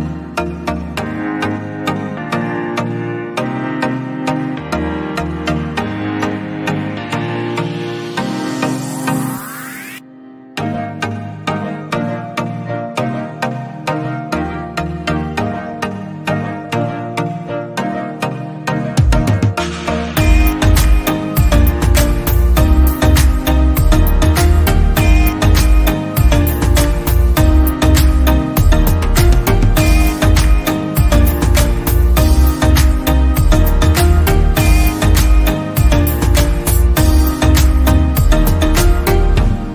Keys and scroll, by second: 13.8 ctrl+c, 14.3 ctrl+v.